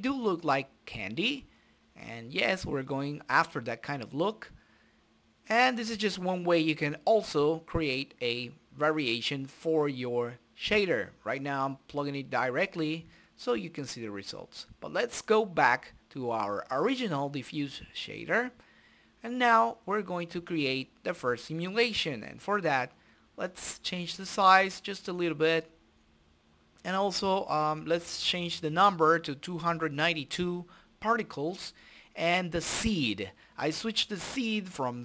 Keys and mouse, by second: 2.2 click, 3.2 click, 4.3-5.7 drag, 6.5 click, 8.2 click, 10.2 click, 11.2 click, 12.9 middle click, 13.1-16.2 drag, 14.2 Delete, 14.8 Delete, 15.0 Delete, 15.4 Delete, 15.6 Delete, 16.9 right click, 17.5 middle click, 17.8 click, 19.4 click, 20.5-22.0 drag, 22.0-23.8 middle drag, 23.8 click, 28.1-30.2 drag, 31.0 click, 31.8 click, 32.3 ctrl+a, 34.5 right click.